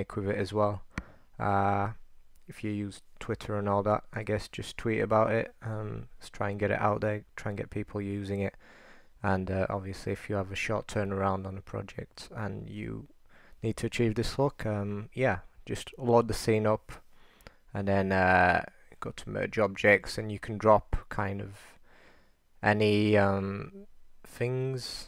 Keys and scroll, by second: 10.7-12.7 typing.